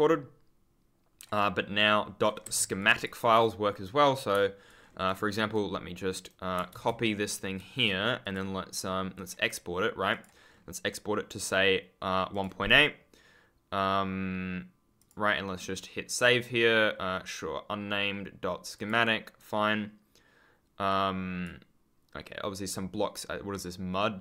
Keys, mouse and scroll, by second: 2.7 click, 4.6 ctrl+click, 4.7-5.3 scroll up 1, 5.4 right click, 6.7 ctrl+c, 8.1 click, 10.4-11.0 scroll down 1, 12.2 click, 14.9 click, 20.8 click.